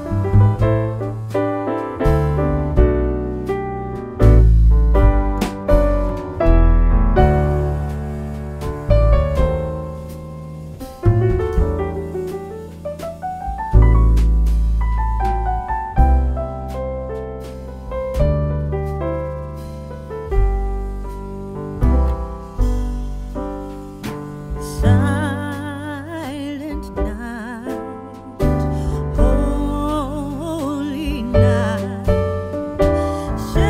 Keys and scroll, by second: 1.0 shift+z, 5.1 shift+z, 6.6 a, 13.6 s, 15.8 r, 17.8 r, 19.4 shift+z, 24.5 2, 24.8 Return, 25.9 3, 26.0 Return, 33.4 shift+z.